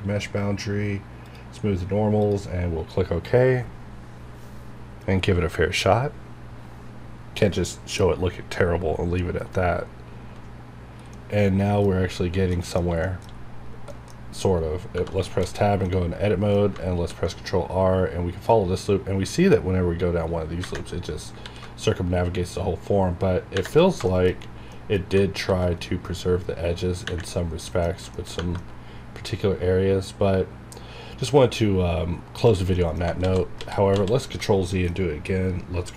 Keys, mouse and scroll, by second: 11.1 middle click, 12.1 scroll up 1, 12.6 middle click, 13.0 shift+middle click, 13.2 shift+scroll up 2, 13.9 middle click, 14.2-14.9 scroll down 1, 15.2 shift+middle click, 16.6 scroll up 1, 17.0 ctrl+r, 21.3 ctrl+r, 23.8 scroll down 2, 24.1 shift+middle click, 24.3 scroll up 1, 24.7 middle click, 25.4 ctrl+r, 27.3 scroll down 1, 27.6 middle click, 27.9 scroll down 1, 28.1 shift+middle click, 28.4 Tab, 28.6 middle click, 28.7 scroll down 1, 32.7 middle click, 33.2 ctrl+z, 34.6 middle click, 35.8 click.